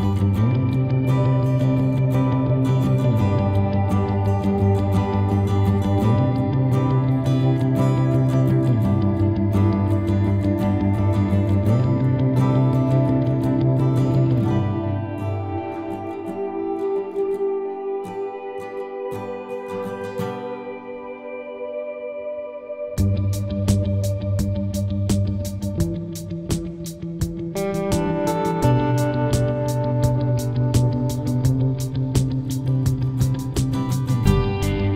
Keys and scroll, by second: 22.0 4, 22.3 9, 22.9 6, 23.3 Return, 26.7 8, 27.1 7, 27.6 Return.